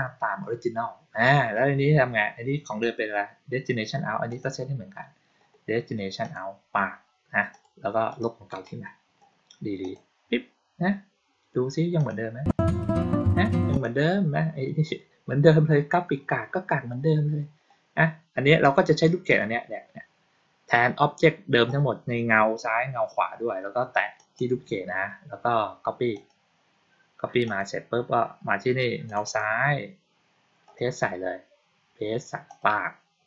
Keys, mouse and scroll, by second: 4.2 click, 6.1 click, 7.4 click, 8.0 click, 8.4 right click, 9.7 click, 11.8 click, 13.6 click, 18.5 click, 19.1 click, 24.0 click, 26.0 click, 27.3 click, 28.9 click, 29.1 click, 32.3 click.